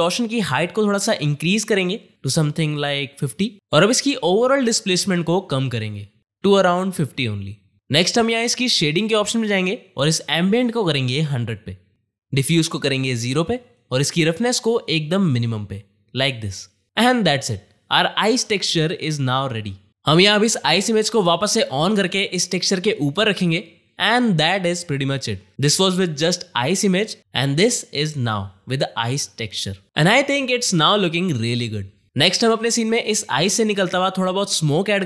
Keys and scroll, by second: 18.0 space.